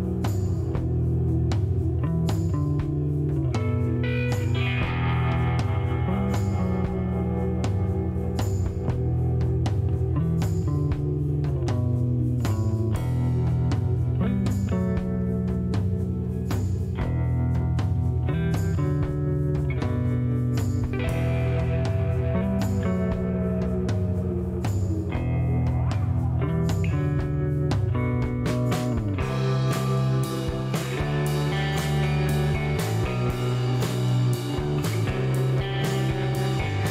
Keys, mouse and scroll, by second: 0.5 click, 1.7-2.6 middle drag, 2.9 shift+right click, 7.3 click, 8.6 scroll down 2, 9.2 scroll down 2, 11.0 click, 12.7 click, 13.1 click, 13.6 shift+middle click, 13.9 shift+right click, 16.1 click, 17.5 click, 17.6 space, 20.3 shift+right click, 21.2 shift+right click, 22.3 shift+middle click, 23.0 shift+right click, 25.1 click, 25.6 click, 26.8 click, 29.4 middle click, 29.8 shift+right click, 29.8 shift+middle click, 33.4 click, 35.7 click.